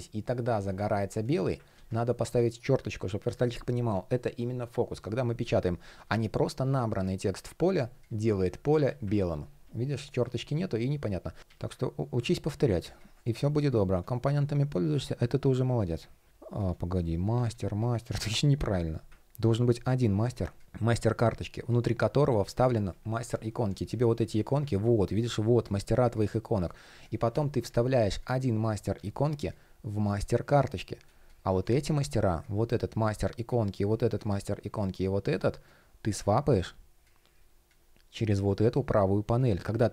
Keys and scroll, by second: 1.3 super+z, 5.6 super+z, 8.7 super+z, 11.0 shift+p, 11.9 shift+o, 19.3 shift+p.